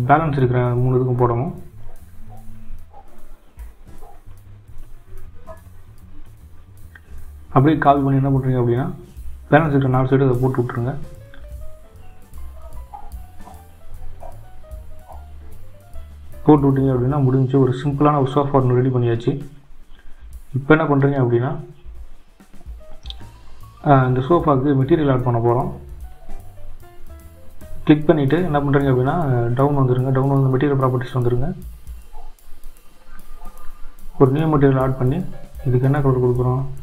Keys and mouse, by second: 1.6 shift+z, 2.2 Tab, 4.3 shift+d, 7.7 click, 9.2 shift+click, 10.0 shift+d, 12.5 click, 21.3 click, 31.9 click, 32.7-33.3 drag, 35.6-36.4 drag.